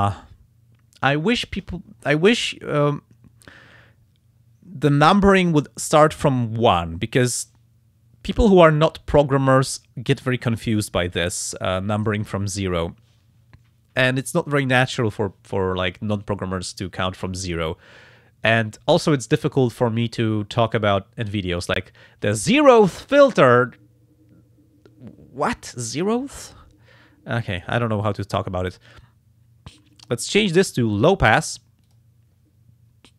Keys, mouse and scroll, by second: 2.4 click, 2.8 click, 22.5 click, 27.5 click, 31.8 click.